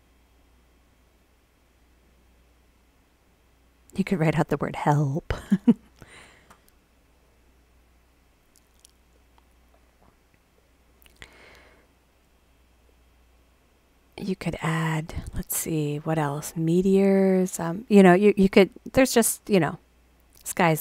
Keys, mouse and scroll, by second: 14.2 click, 17.8 click.